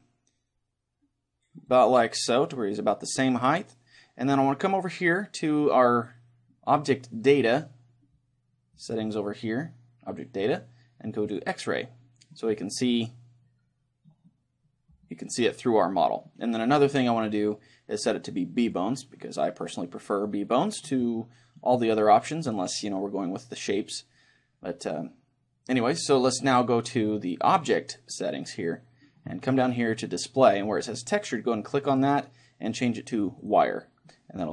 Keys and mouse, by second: 1.8-3.7 drag, 8.8-10.7 drag, 11.3-13.3 drag, 12.5-17.4 middle drag, 18.7-20.5 drag, 19.7-22.4 middle drag, 27.5-29.4 drag, 31.2-33.7 drag, 34.1-34.5 middle drag.